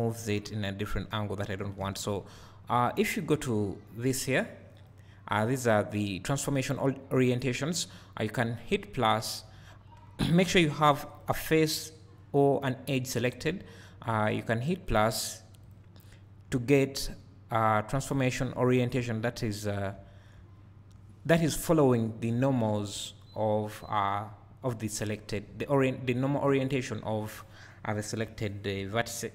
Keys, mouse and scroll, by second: 9.9-11.2 drag, 10.2 scroll up 2, 10.5 alt+a, 15.7-20.7 drag, 16.6 `, 19.8 scroll up 2, 19.9 `.